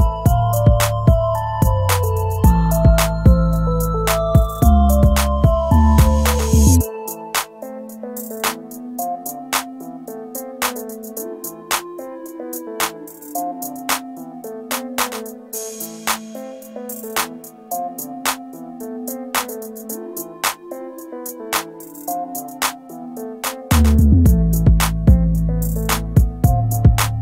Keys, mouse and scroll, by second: 2.3-4.2 scroll down 1, 5.2 scroll up 1.